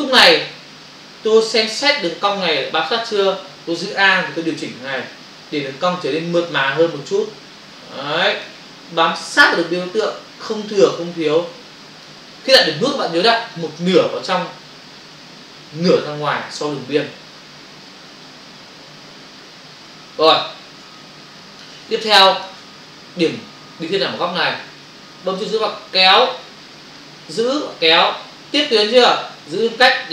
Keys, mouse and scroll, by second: 5.2 alt+click, 9.5 alt+click, 17.8 ctrl+click, 20.8 space, 26.9 click, 29.6 space.